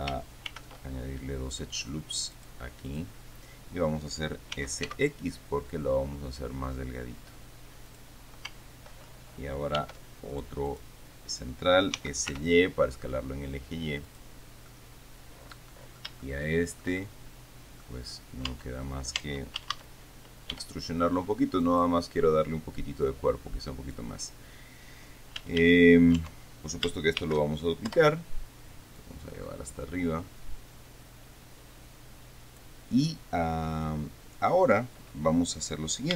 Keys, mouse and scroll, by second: 0.7 ctrl+r, 2.6 click, 3.1 click, 4.8 s, 8.2 click, 10.0 ctrl+r, 10.6 ctrl+click, 12.2 s, 12.7 y, 14.3 middle click, 14.9-17.2 middle drag, 17.2-18.3 shift+drag, 18.3-19.1 scroll up 2, 18.8 Tab, 19.5 Tab, 19.9 a, 20.8 e, 21.9 click, 23.3-24.4 drag, 25.7 a, 26.5 Tab, 27.5 shift+d, 28.2 Return, 29.3-33.1 drag.